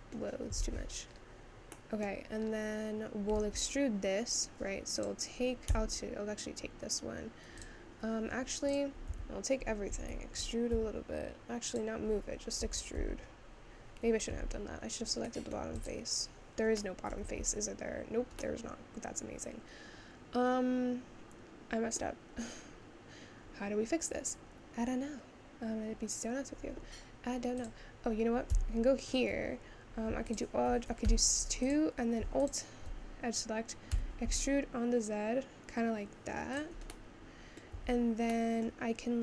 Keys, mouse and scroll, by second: 0.6 ctrl+z, 1.1-1.9 scroll up 2, 1.9 middle click, 2.4-3.5 scroll up 2, 3.5 Tab, 5.0 click, 5.8 a, 7.6 click, 8.8 click, 9.2 a, 15.5 middle click, 15.9 click, 16.8 middle click, 17.4 Tab, 18.6-21.9 middle drag, 22.6-23.8 scroll down 2, 23.8-24.4 scroll up 2, 24.4-24.7 scroll down 1, 25.2 scroll down 1, 25.9-27.7 scroll up 1, 27.7 click, 28.6 Tab, 30.3 alt+click, 31.1 2, 31.7 click, 33.9 e, 36.9 middle click, 37.8 Tab, 38.5 middle click.